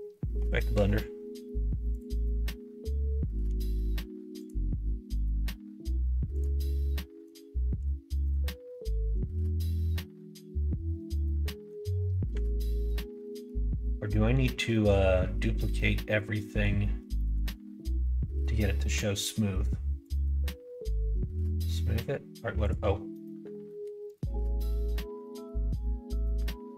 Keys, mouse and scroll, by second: 4.3 click, 6.3 click, 7.7-10.9 right drag, 12.5 alt+click, 13.0 middle click, 14.1 middle click, 14.5 shift+middle click, 15.7 middle click, 17.1 shift+middle click, 20.0 click, 22.6-26.7 drag.